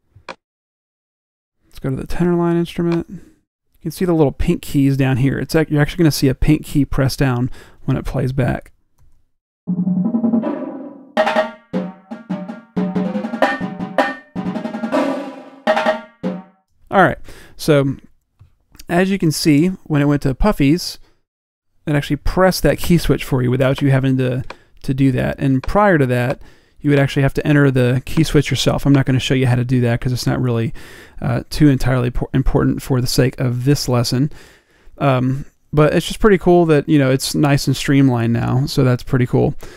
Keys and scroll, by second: 22.0 m.